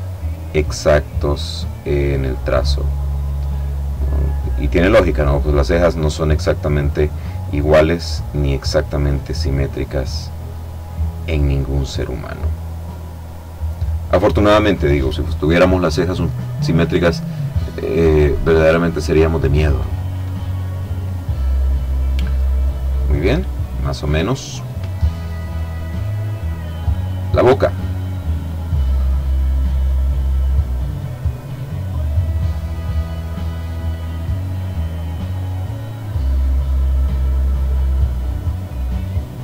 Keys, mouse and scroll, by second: 0.3-1.9 drag, 2.0 click, 3.5 click, 4.9-6.8 drag, 7.3-8.7 drag, 8.8-10.4 drag, 10.7-13.4 drag, 16.7-19.0 drag, 20.4-22.3 drag, 25.3 click, 28.1 click, 28.7 click, 31.3 click, 35.3 click, 36.4 click, 37.7-39.4 drag.